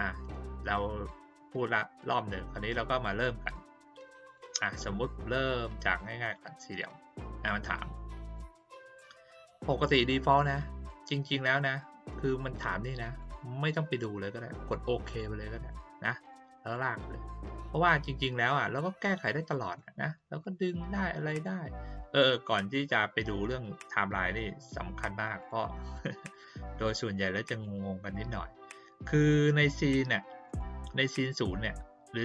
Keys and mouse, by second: 0.7-1.6 drag, 4.2 click, 6.2 click, 7.9-8.3 drag, 10.3-13.2 drag, 15.1 click, 16.3 click, 19.3 click, 20.4-21.3 drag, 25.4 click, 25.9 click, 26.3 click, 27.5 click, 28.0 click, 30.4 click.